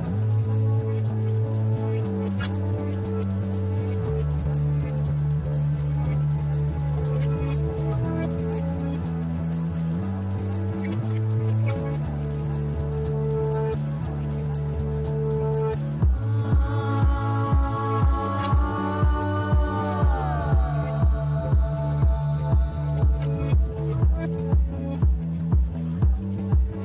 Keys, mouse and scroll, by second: 0.9 middle click, 1.7 e, 4.8 Tab, 5.8 shift+z, 6.9 KP_1, 7.9-10.2 scroll up 1, 10.2 Tab, 13.3 click, 16.2 alt+shift+click, 17.4 click, 18.6 alt+shift+click, 19.3-20.3 scroll down 2, 20.3 ctrl+click, 21.6 shift+click, 22.3 ctrl+z, 22.7 ctrl+z, 24.0 ctrl+click, 25.0 ctrl+z, 25.5 shift+click, 26.4 scroll down 3, 26.7 middle click.